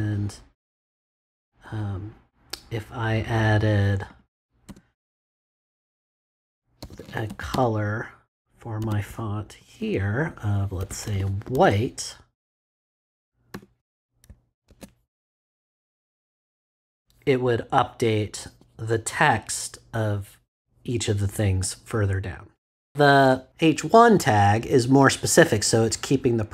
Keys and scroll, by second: 4.6 space, 6.5-12.0 typing, 13.5 ;, 14.2 super+;, 14.7 super+s.